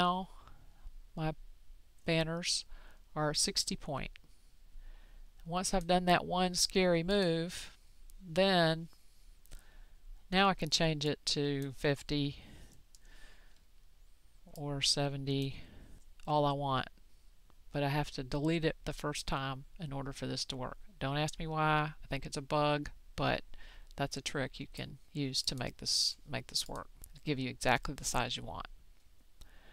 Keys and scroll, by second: 12.2 5, 12.8 5.